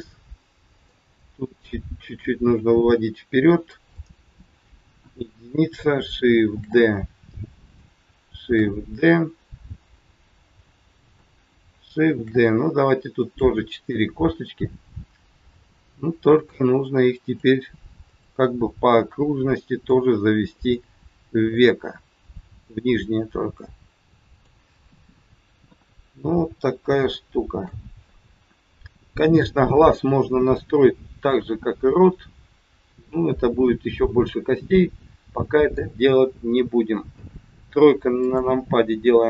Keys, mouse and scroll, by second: 1.6 click, 4.0 middle click, 4.9 KP_1, 6.5 shift+d, 8.5 shift+d, 12.1 shift+d, 13.6 middle click, 16.2 click, 18.0 click, 20.6 click, 21.5 click, 23.0 middle click, 25.5 KP_1, 26.3 scroll up 2, 27.0 shift+middle click, 27.0 shift+scroll up 1, 29.4 scroll down 4, 30.4-30.7 scroll down 1, 32.8 scroll up 3, 34.6 middle click, 37.1 KP_3, 38.1 click.